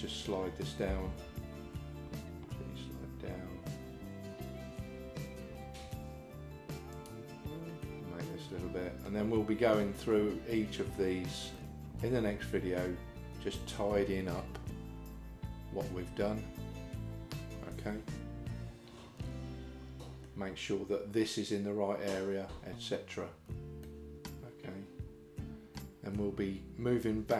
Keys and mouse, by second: 0.9 g, 7.9-9.1 middle drag, 11.6-20.3 middle drag, 23.9-26.2 middle drag.